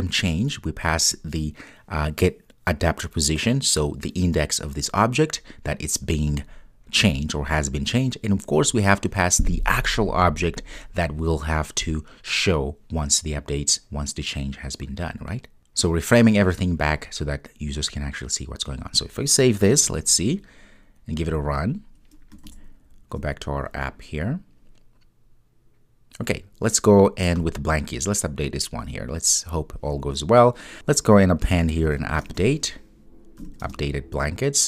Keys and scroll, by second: 19.9 super+s, 21.4 ctrl+r.